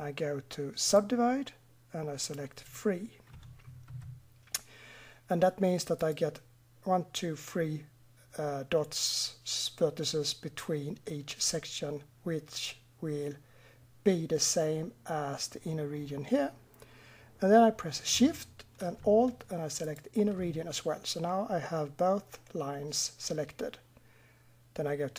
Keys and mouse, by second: 0.8-5.0 drag, 6.0-9.0 drag, 19.8-23.8 drag.